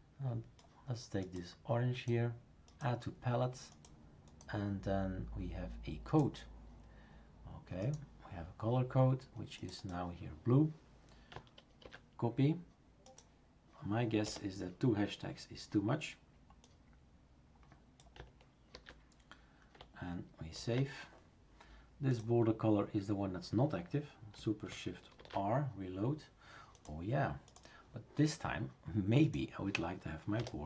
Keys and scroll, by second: 11.8 ctrl+v, 14.2 BackSpace, 18.7 ctrl+v, 20.5 ctrl+s, 25.2 shift+super+r, 30.4-30.6 typing.